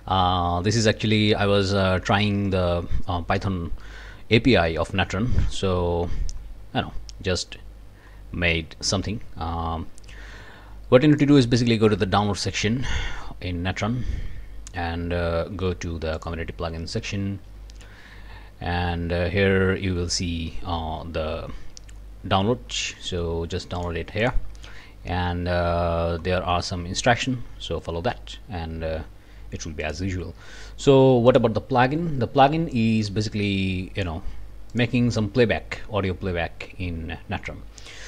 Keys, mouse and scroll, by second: 0.6-2.4 scroll down 11, 3.2-4.8 scroll down 8, 4.5 click, 5.8 scroll down 2, 6.3-6.9 scroll up 2, 8.1-8.7 scroll down 4, 10.2 scroll up 2, 11.1 click, 16.2 click, 19.2-20.0 scroll down 3, 20.7-21.6 scroll up 2, 21.6 scroll down 2, 22.6-23.2 scroll up 2, 23.8 click, 24.2 click, 25.5 scroll down 2, 26.1 scroll up 2, 29.8 click, 31.3 click, 32.8-34.2 drag, 34.7 click.